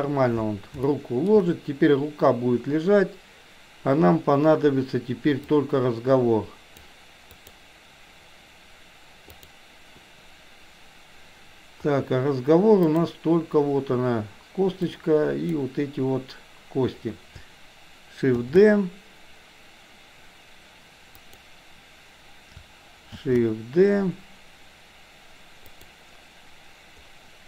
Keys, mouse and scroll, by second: 0.9 shift+middle click, 5.4-6.8 drag, 7.3 click, 9.3 click, 12.8 click, 14.9-15.5 drag, 18.3 shift+d, 23.2 shift+d.